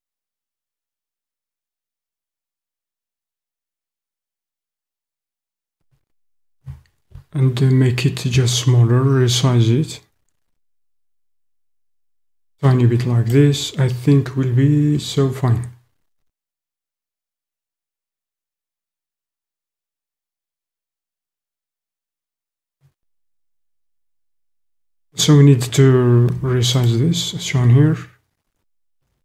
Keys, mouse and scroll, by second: 5.4 click, 6.5 s, 12.3 click, 13.3-15.1 drag, 15.5-19.4 middle drag, 19.4 click, 20.8-24.2 drag, 26.8 alt+click, 28.9 s.